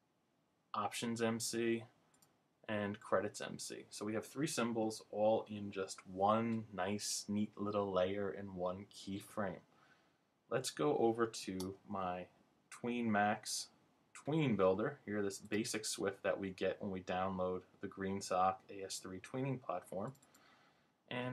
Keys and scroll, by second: 11.6 super+Tab.